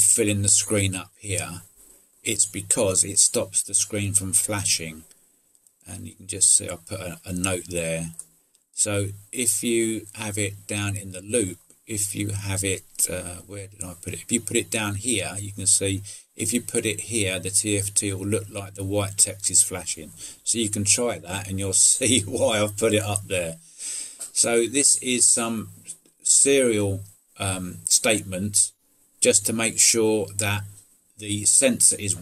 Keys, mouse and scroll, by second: 1.8 click, 5.6-7.8 drag, 10.5 click, 11.4 middle click, 13.7 middle click, 22.2 middle click, 23.8 middle click.